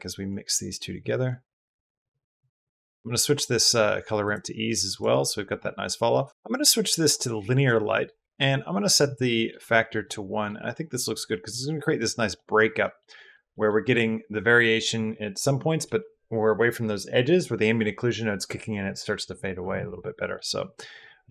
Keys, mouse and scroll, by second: 0.9-3.5 drag, 4.1-4.8 drag, 5.9 drag, 7.7 middle click, 9.1 middle click, 9.5 middle click, 9.8 middle click, 10.5 middle click, 11.1 middle click, 11.6 middle click, 12.2 middle click, 12.6 middle click, 13.0 middle click, 13.3 middle click, 20.1 middle click, 20.7 middle drag, 21.2 click.